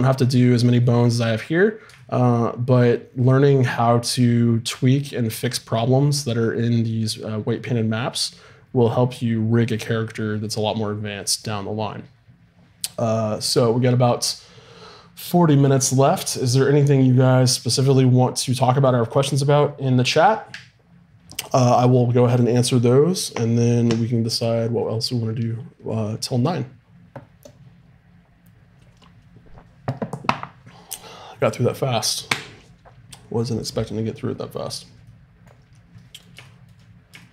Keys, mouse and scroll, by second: 0.7-2.0 middle drag.